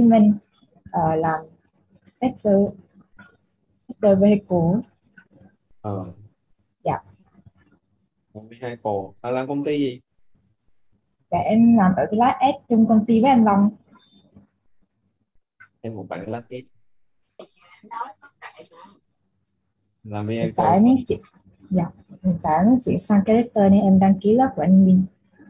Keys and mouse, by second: 2.4 click, 4.8-11.2 typing, 14.8-17.0 typing, 18.1 g, 23.7 ,, 24.1 space.